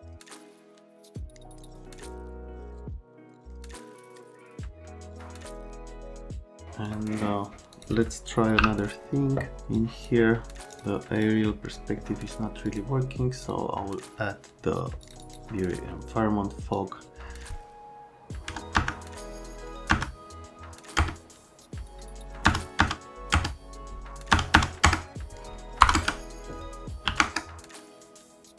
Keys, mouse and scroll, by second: 0.1 click, 1.3 click, 2.5 click, 2.7 click, 6.0 click, 6.4 click, 6.8 click, 7.7 click, 8.6 8, 9.8 click, 10.7 click, 11.1 click, 12.6 click, 13.4 click, 15.0 click, 15.2 click, 16.7 click, 18.5 KP_0, 18.7 KP_0, 19.9 KP_0, 21.0 KP_Enter, 22.5 KP_0, 22.8 KP_0, 23.3 KP_Enter, 24.3 KP_0, 24.5 KP_0, 24.8 KP_Enter, 25.8 BackSpace, 25.9 KP_Enter, 27.0 KP_5, 27.2 KP_Enter.